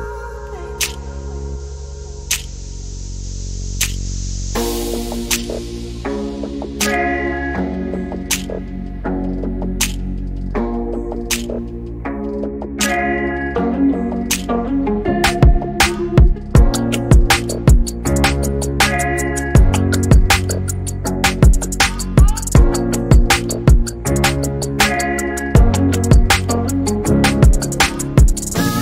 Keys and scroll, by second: 2.3 typing, 6.1 m.